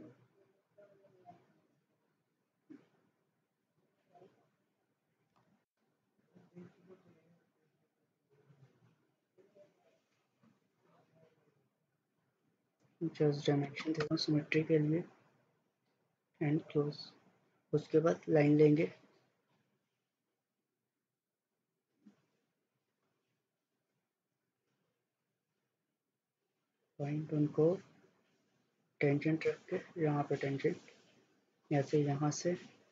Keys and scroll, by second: 5.1-6.0 typing, 13.4-14.2 typing, 16.5-17.3 typing.